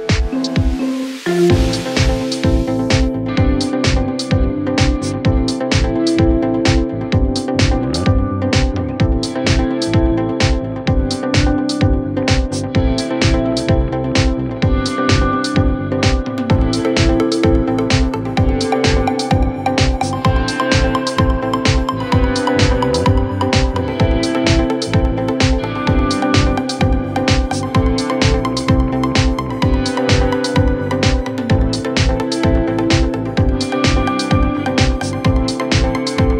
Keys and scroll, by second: 34.2 ctrl+z.